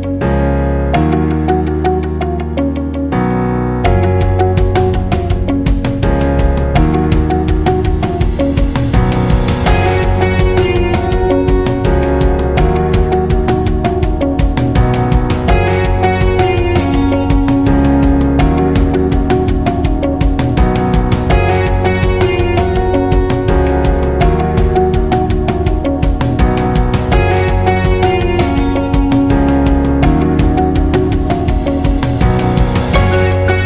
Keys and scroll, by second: 29.1 Escape.